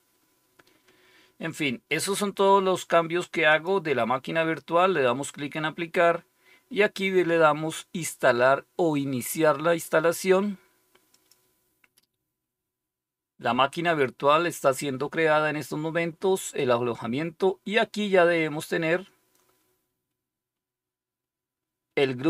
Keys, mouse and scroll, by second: 3.4 click, 11.0 click.